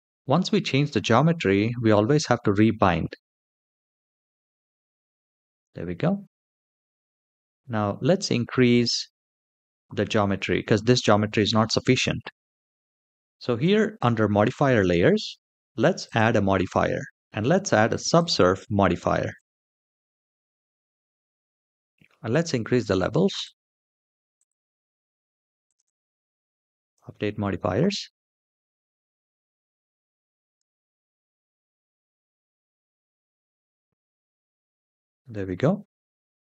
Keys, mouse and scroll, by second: 3.1 click, 7.8-11.4 scroll down 4, 15.8-19.3 drag, 20.4-22.0 scroll down 4, 22.0 click, 23.1 click, 24.1 click, 25.4 click, 25.6 click, 26.5 click, 28.8 middle click, 30.2 click, 30.7 space.